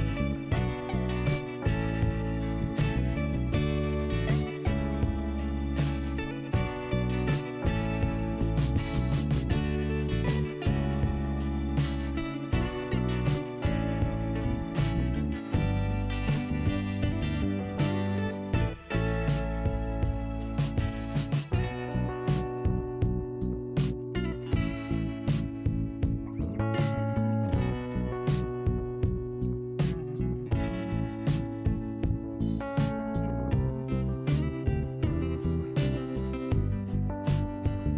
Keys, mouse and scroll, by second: 1.4 click, 3.1 click, 5.0 click, 5.5 scroll up 2, 6.5 click, 12.1 scroll down 1, 12.6 scroll up 1, 13.7 click, 15.6 click, 17.0 scroll down 1, 18.4 click, 19.2 click, 22.9 scroll up 1, 24.2 scroll down 1, 25.0 p, 26.4 click, 28.7 scroll down 1, 29.4 scroll up 2, 32.1 click, 33.9 click, 35.8 click.